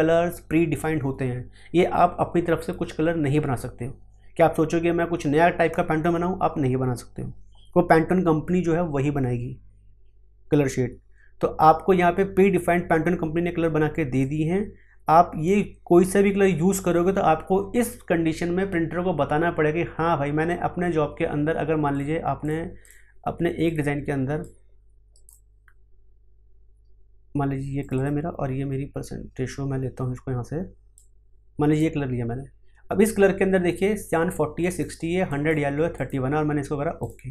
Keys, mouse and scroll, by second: 12.4-14.2 scroll down 1, 14.2-25.1 drag, 25.1 right click, 27.8 click, 30.9-34.1 drag, 34.1 click.